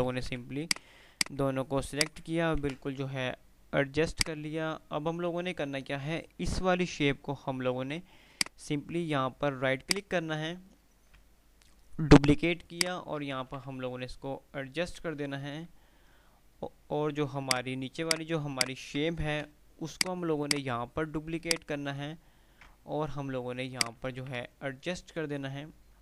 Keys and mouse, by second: 0.0-0.8 typing, 0.9 click, 2.9 Delete, 4.3 click, 8.5-10.6 drag, 9.9-12.9 right drag, 12.9 shift+click, 13.4-14.1 typing, 17.7 click, 19.6 Delete, 20.0-22.2 drag, 21.7-23.6 right drag, 23.6 shift+click.